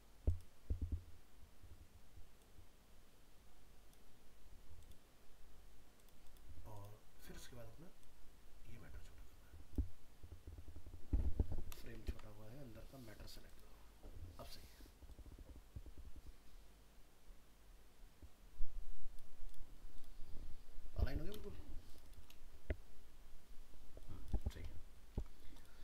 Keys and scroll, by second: 12.1 ctrl+z, 21.5 ctrl+space, 24.8 ctrl+-.